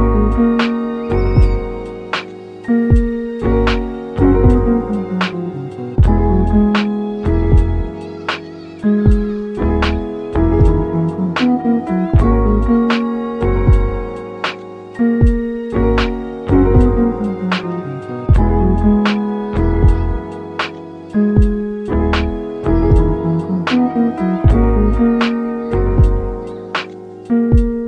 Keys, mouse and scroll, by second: 0.7 click, 1.2 3, 1.7 click, 2.1 middle click, 2.8 shift+click, 3.3-4.9 middle drag, 4.8 i, 5.8 click, 6.4 i, 6.4 i, 8.5 click, 8.7 middle click, 9.2 Tab, 9.5-11.2 middle drag, 11.2 Tab, 11.4 middle click, 12.0 2, 12.4-13.5 scroll up 1, 13.6 alt+click, 14.5 shift+d, 14.9 shift+right click, 15.7 p, 16.3 click, 16.7 Tab, 17.1 click, 18.0 g, 18.8 right click, 20.2-22.5 right drag, 22.2 click, 22.5 middle click, 22.9 Tab, 23.3 scroll up 1, 23.6-24.7 middle drag, 24.6 1, 25.1 scroll down 1, 25.3 middle click, 25.6 a, 26.4 f, 27.0-27.8 middle drag.